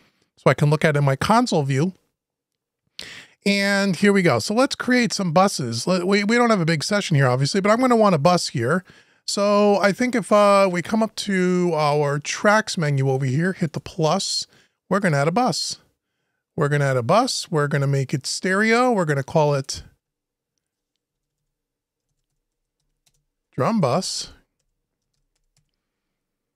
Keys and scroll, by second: 20.8 Left, 21.8 shift+Left, 23.6 Delete, 24.8 shift+Delete.